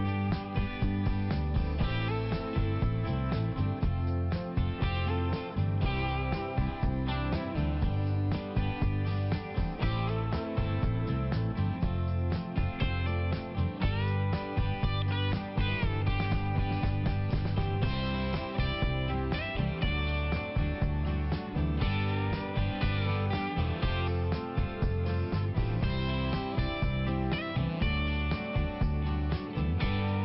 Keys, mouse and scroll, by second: 0.3 click, 0.5 click, 0.7 click, 0.9 double click, 1.0 double click, 1.1 double click, 1.4 double click, 1.5 double click, 1.7 double click, 1.9 double click, 2.0 double click, 2.6 click, 2.7 click, 2.8 click, 3.0 double click, 3.2 double click, 3.7 click, 3.8 click, 4.0 click, 4.1 double click, 4.3 double click, 4.5 double click, 4.8 double click, 4.9 double click, 5.2 double click, 5.3 double click, 5.7 double click, 5.8 double click, 6.0 double click, 6.1 double click, 6.7 click, 6.8 click, 7.0 click, 7.2 click, 7.6 click, 8.0 double click, 8.1 double click, 8.3 double click, 8.5 double click, 8.7 double click, 8.8 double click, 9.2 double click, 9.7 click, 9.8 click, 10.2 click, 10.2 double click, 10.5 double click, 10.7 double click, 11.0 double click, 11.1 double click, 11.4 double click, 11.5 double click, 11.8 double click, 11.9 double click, 12.4 double click, 14.0 click, 14.2 click, 14.4 click, 14.5 double click, 14.7 double click, 14.9 double click, 15.0 double click, 15.1 double click, 15.3 double click, 15.4 double click, 15.7 double click, 15.8 double click, 16.0 double click, 16.1 double click, 16.3 double click, 16.4 double click, 16.7 double click, 16.8 double click, 17.1 double click, 17.2 double click, 17.4 double click, 17.5 double click, 17.8 double click, 17.9 double click, 18.2 double click, 18.3 double click, 18.6 double click, 18.7 double click, 18.9 double click, 19.0 double click, 19.4 double click, 20.8 click, 20.9 click, 21.0 click, 21.2 double click, 21.4 double click, 21.6 double click, 21.7 double click, 21.9 double click, 22.1 double click, 22.3 double click, 22.5 double click, 22.6 double click, 22.9 double click, 23.1 double click, 23.3 double click, 23.5 double click, 23.7 double click, 23.8 double click, 24.0 double click, 24.3 click, 24.5 click, 24.6 click, 24.7 double click, 25.0 double click, 25.1 double click, 25.3 double click, 25.5 double click, 26.0 double click, 27.7 click, 27.8 click, 28.0 click, 28.1 double click, 28.3 double click, 28.4 double click, 28.6 double click, 28.7 double click, 28.9 double click, 29.1 double click, 29.3 double click, 29.4 double click, 29.6 double click, 29.7 double click, 30.0 double click, 30.1 double click.